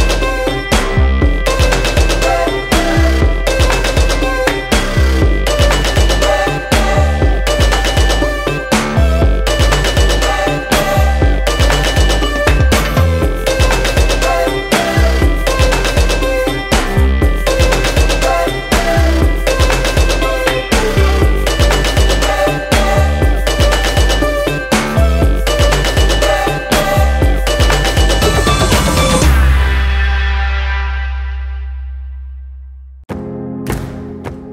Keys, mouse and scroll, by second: 21.5 click, 24.0-28.6 drag.